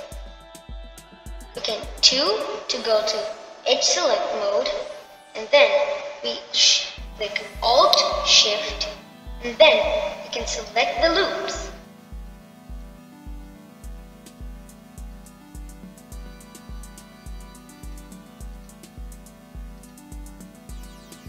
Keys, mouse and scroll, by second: 1.2-3.8 middle drag, 12.5 alt+shift+click, 14.5 alt+shift+click, 15.3-16.9 middle drag, 16.9 alt+shift+click, 17.5-19.6 middle drag, 19.6 alt+shift+click, 20.4 alt+shift+click.